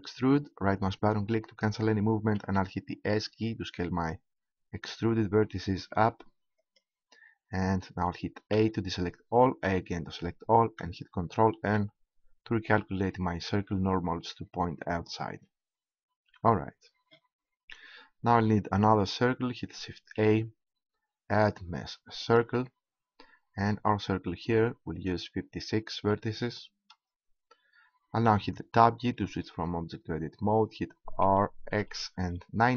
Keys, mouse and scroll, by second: 2.4 click, 2.4 s, 6.7-8.5 drag, 8.5 a, 9.6 a, 11.5 ctrl+n, 16.3 Tab, 20.0 shift+a, 25.0-26.7 drag, 28.7 Tab, 31.3 r.